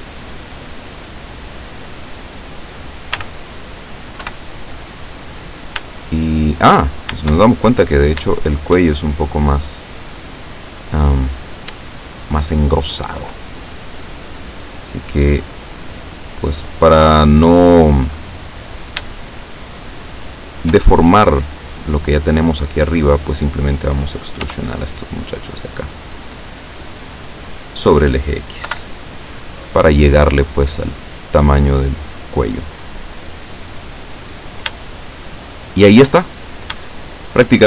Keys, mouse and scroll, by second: 3.2 a, 4.2 KP_7, 6.3 shift+middle click, 7.5-8.1 shift+scroll up 4, 8.4 shift+middle click, 9.0-13.1 shift+middle drag, 16.3-18.2 middle drag, 18.7 right click, 19.7 shift+right click, 20.3 shift+right click, 24.5 e, 27.6 click, 28.7 KP_7, 30.2-33.6 drag, 34.0-34.7 scroll down 2, 35.0-36.2 shift+middle drag, 36.4 shift+scroll down 2, 37.0 shift+middle click.